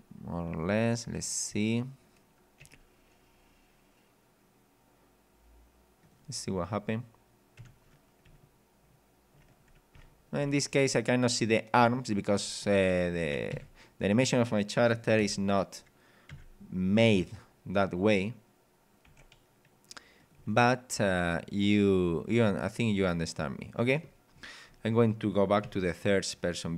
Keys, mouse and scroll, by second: 1.2-1.5 scroll up 2, 2.6 g, 6.0 click, 6.5 scroll down 1, 6.9 scroll up 2, 7.6 p, 8.3 w, 10.4 d, 11.8 w, 13.5 Escape, 15.2 KP_0, 16.3 KP_3, 17.5 scroll up 1, 18.1-18.4 scroll up 1, 19.1 r, 20.2 click, 20.4 g, 22.9 click, 24.3-24.9 scroll down 3, 25.7 g.